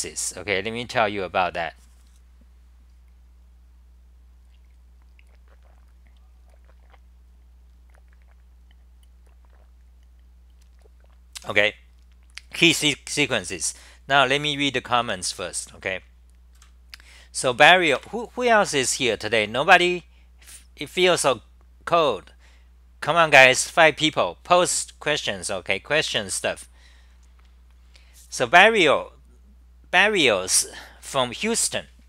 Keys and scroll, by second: 15.2 scroll down 1, 18.5-19.3 scroll down 5, 18.5 c.